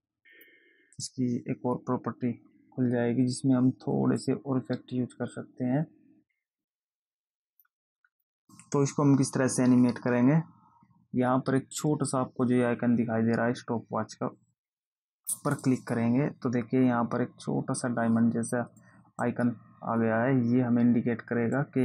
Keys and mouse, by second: 0.7 click, 4.5 click, 15.9 click, 19.1 click.